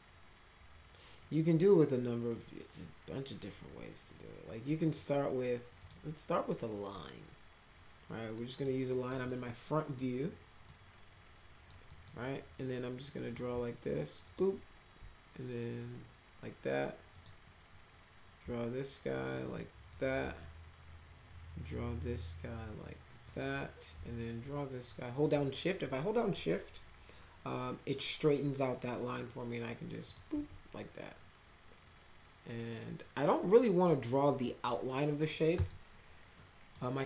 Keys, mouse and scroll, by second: 4.8 click, 5.8 click, 8.3 middle drag, 8.8 middle drag, 9.2-9.9 middle drag, 10.6-11.7 middle drag, 11.8 middle click, 13.2 click, 14.2 shift+click, 17.1 click, 19.9 shift+click, 23.2 click, 30.0 shift+click, 35.5 right click, 36.3-36.7 middle drag.